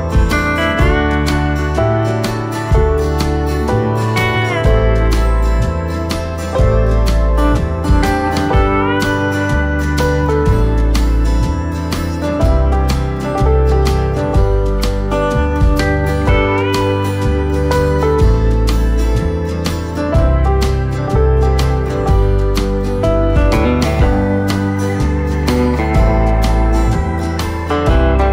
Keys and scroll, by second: 7.7 v, 19.8 v.